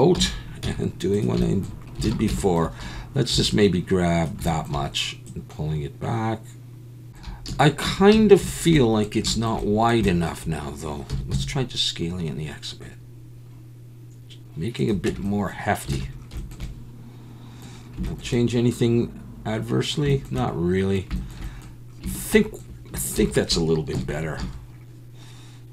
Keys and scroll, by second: 0.1 KP_7, 0.6 z, 2.1 alt+a, 2.8 1, 3.3 b, 7.4 alt+a, 7.8 Tab, 8.1 a, 11.1 s, 11.3 x, 15.1 Tab, 15.9 alt+a, 23.1 ctrl+s, 23.9 KP_1, 24.4 a.